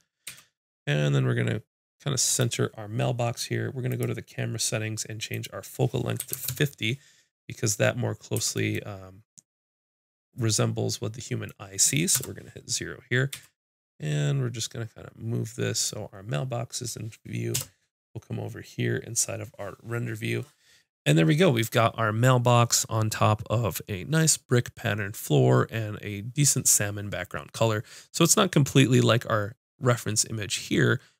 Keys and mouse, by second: 0.3 g, 3.9-8.4 drag, 8.4 g, 12.1 KP_0, 13.3 g, 15.9-17.5 drag, 17.5 KP_0.